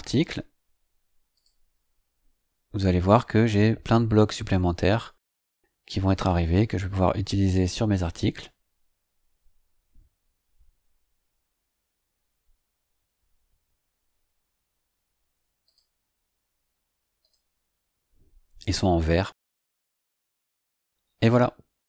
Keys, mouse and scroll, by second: 1.3 click, 6.1 click, 15.6 click, 17.2 click, 20.8-21.6 scroll down 3.